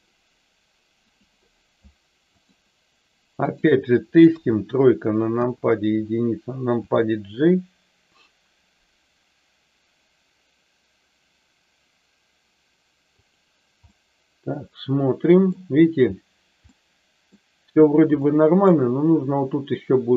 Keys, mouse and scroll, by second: 1.0 click, 2.3 shift+click, 3.4 shift+click, 4.2 KP_3, 5.4 KP_1, 6.8 g, 13.2 click, 13.9-15.5 middle drag, 16.7 middle click, 18.3 middle click.